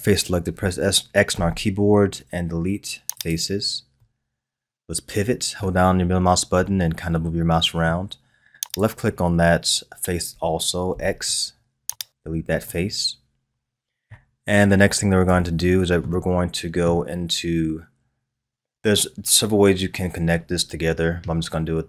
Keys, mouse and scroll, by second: 1.3 x, 4.0-8.6 middle drag, 8.6 click, 10.9 x, 12.7-14.5 middle drag, 14.5-15.4 scroll up 2, 15.4-18.4 shift+middle drag.